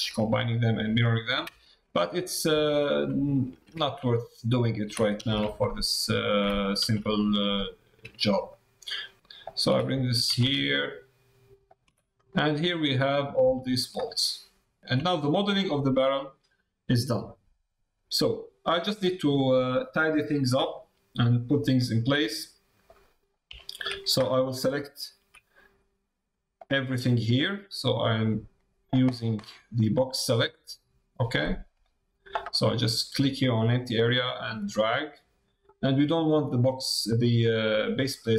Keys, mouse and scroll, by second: 1.6 shift+middle click, 2.0 middle click, 2.6 middle click, 3.7 alt+d, 6.8 alt+d, 12.1 middle click, 13.1 middle click, 13.5 shift+middle click, 14.0 middle click, 15.0 middle click, 15.7 shift+middle click, 16.9 middle click, 19.0 middle click, 20.3 middle click, 21.3 middle click, 21.7 shift+middle click, 22.2 middle click, 23.5 shift+middle click, 26.5-31.9 drag, 33.9-35.3 drag.